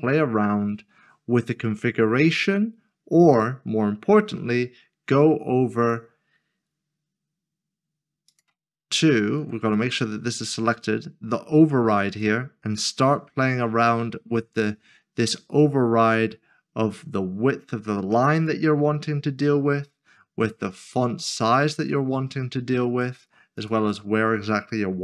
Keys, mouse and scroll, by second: 5.8 scroll up 1, 5.9 click, 8.3 click, 12.1 click, 15.6 click, 20.7 click.